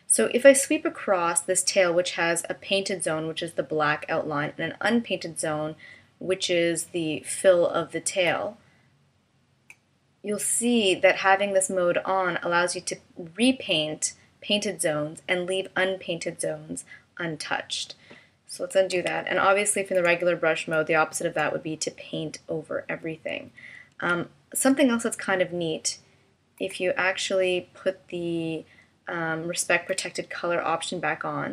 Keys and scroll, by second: 18.9 super+z, 23.9 super+z.